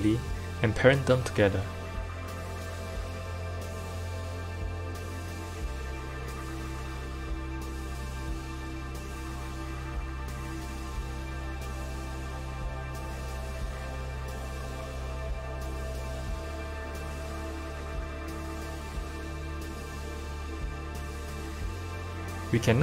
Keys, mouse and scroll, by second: 5.4 click, 6.5 F2, 9.4 BackSpace, 12.0 BackSpace, 15.2 click, 16.2 shift+click, 17.3 ctrl+p, 19.7 click, 20.9 click, 22.0 click, 22.4-22.8 drag.